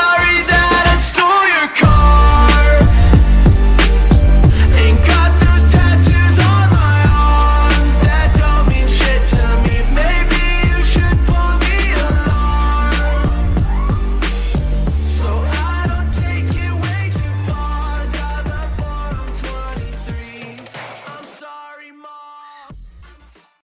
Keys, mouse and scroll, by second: 4.9 right click, 6.1 click, 9.4 ctrl+g, 10.4 click, 14.9 click.